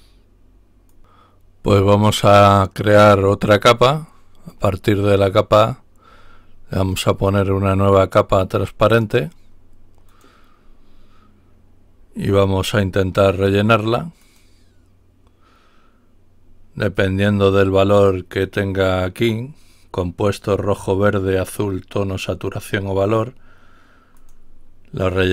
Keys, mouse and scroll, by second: 0.9 click, 4.4 right click, 6.7 click, 10.0 click, 14.3 click, 18.5 click, 24.1 click.